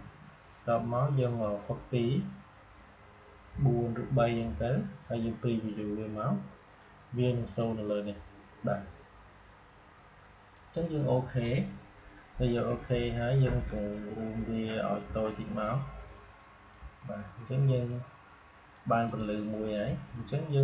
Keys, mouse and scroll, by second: 1.3 click, 4.9-10.4 drag, 13.8-17.8 drag, 17.8 click.